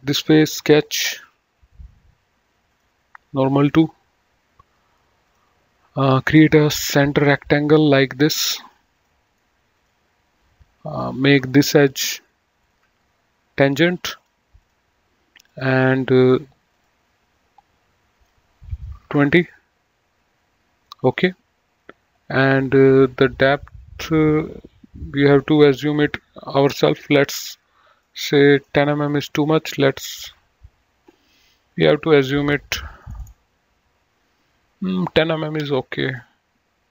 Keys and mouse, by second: 2.7 click, 5.2 click, 7.6 click, 8.7 click, 9.2 right click, 9.7 click, 10.8 click, 12.4 ctrl+click, 14.2 click, 18.5 KP_2, 19.2 Return, 21.0 click, 22.9 click, 23.5 middle click, 25.3 click, 28.1 middle click, 29.9 click, 35.5 click, 36.2 middle click.